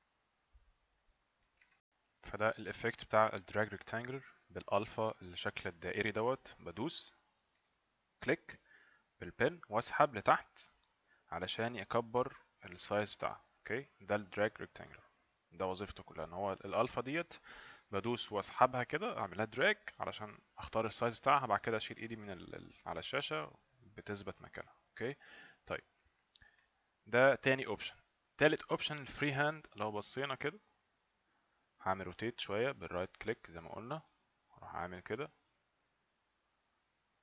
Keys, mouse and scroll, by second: 1.6 alt+F9, 7.6 click, 8.4 click, 26.6 click, 28.8 click, 29.1 click, 32.9 right click, 34.6 right click, 34.6 click.